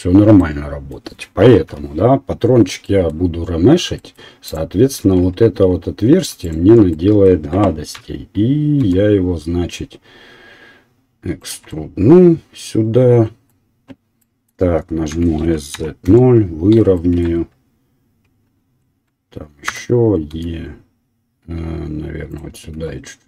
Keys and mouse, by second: 1.7 Delete, 4.1-11.3 drag, 4.1 middle click, 4.1 right click, 5.0 Tab, 6.4 alt+middle click, 6.4 alt+right click, 7.9 e, 11.3 right click, 11.5-21.7 middle drag, 15.1 s, 20.3 e, 22.9 s, 23.1 e.